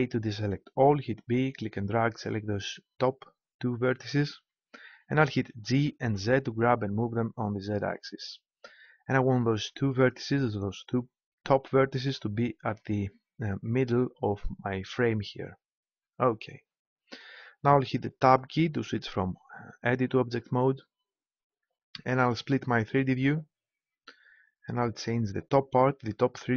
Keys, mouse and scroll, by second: 1.0 b, 5.3 g, 18.5 Tab, 23.2-24.9 right drag.